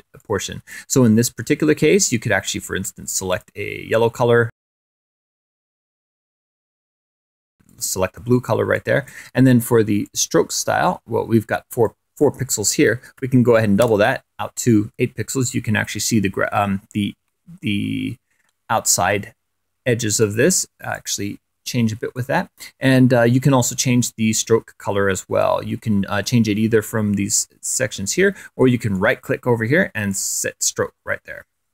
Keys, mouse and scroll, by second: 0.0 click, 0.6 click, 2.2 click, 5.4 click, 7.2 click, 8.3 click, 9.6 click, 11.4 click, 12.7 8, 13.4 Return, 16.3-16.7 ctrl+scroll up 4, 17.7 scroll down 2, 18.1 click, 18.8 scroll up 4, 18.9 middle click, 19.1 click, 19.7 click, 21.7 click, 28.5-28.8 scroll up 1, 29.6-29.9 scroll up 1.